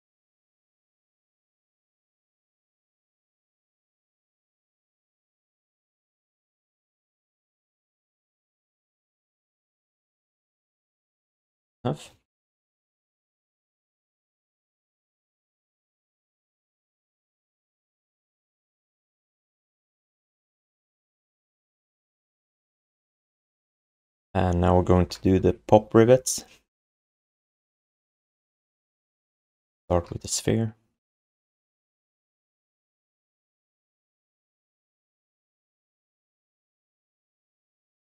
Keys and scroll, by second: 2.1 r, 5.7 q, 7.5 q, 8.9 alt+shift+d, 9.3 3, 11.5 1, 12.1 alt+q, 15.6 q, 16.5 alt+shift+d, 16.8 ctrl+s, 18.5 1, 21.9 alt+shift+d, 22.2 ctrl+s, 30.0 r, 35.7 space, 36.1 space.